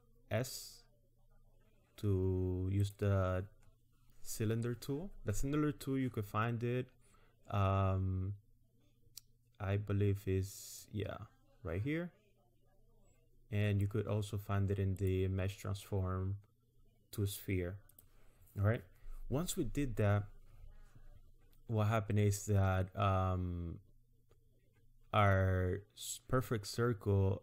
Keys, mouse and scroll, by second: 10.8 click, 15.0 click, 17.9 click.